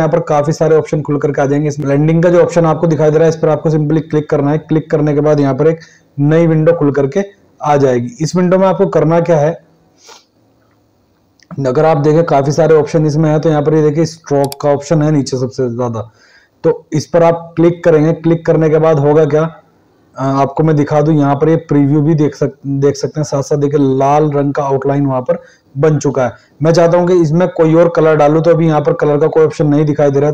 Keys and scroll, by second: 6.4 ctrl+1, 11.8 ctrl+1, 21.3 ctrl+1.